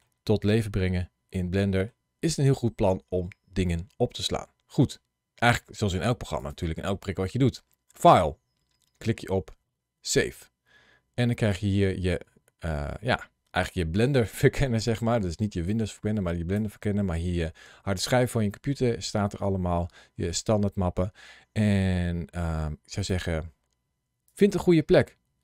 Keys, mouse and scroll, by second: 0.3 scroll up 1, 0.9 scroll up 1, 1.2 middle click, 6.2 click.